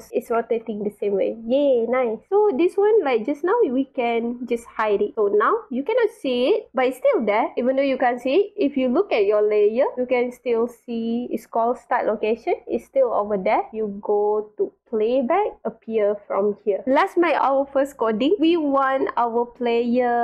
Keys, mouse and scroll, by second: 0.1 w, 0.3 space, 2.2 click, 4.2-5.1 drag, 5.6 click, 6.5 scroll down 2, 6.6 middle click, 7.0 click, 9.2 click, 11.5 click, 13.7 click, 14.9 click, 15.6-16.5 drag, 17.5-18.0 drag, 18.4-18.7 drag, 19.6-20.1 scroll up 2.